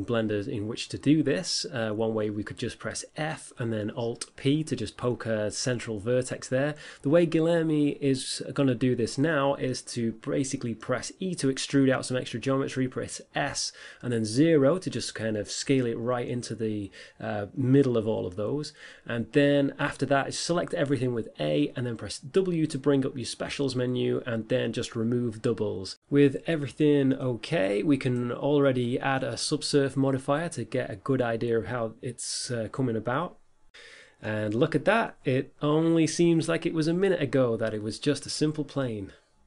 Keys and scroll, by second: 13.8 s, 14.0 0, 14.4 Return, 23.0 w, 27.0 a, 28.5 Tab, 37.1 Tab.